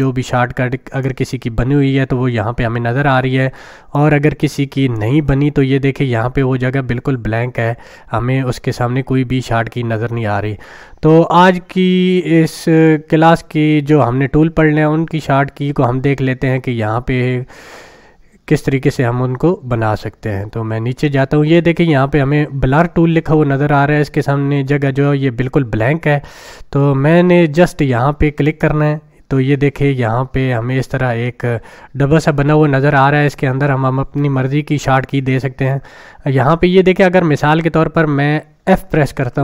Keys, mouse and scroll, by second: 0.0-1.3 drag, 3.9-5.2 drag, 13.4-21.1 drag, 28.5 click, 39.2 f.